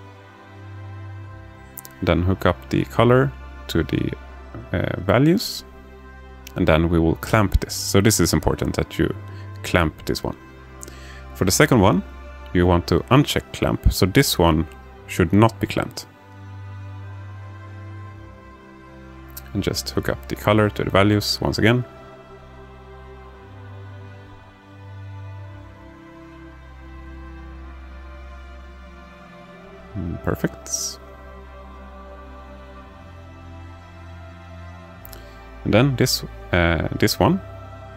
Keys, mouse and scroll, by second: 0.5 shift+a, 9.6-10.3 drag, 11.0-12.2 drag, 12.9 click, 14.6 shift+d, 17.6 alt+shift+middle click, 21.0 click, 24.4-27.9 drag, 29.4-30.6 drag, 34.0 click, 34.2 click, 35.1 alt+shift+middle click, 36.1 shift+a.